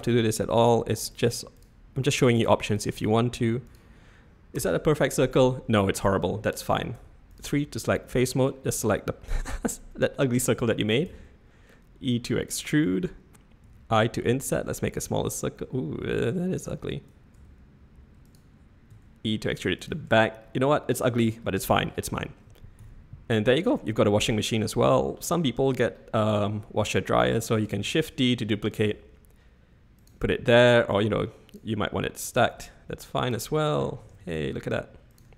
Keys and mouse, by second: 7.1 3, 7.3 click, 7.9 click, 9.2-9.7 drag, 11.1 e, 17.3 s, 18.9 e, 20.0 Tab, 20.4-21.2 drag, 21.5-21.8 drag, 22.8 /, 23.9-24.3 shift+middle drag, 25.1 shift+middle drag, 27.7 shift+d, 31.0 click, 32.3 click, 34.0 g.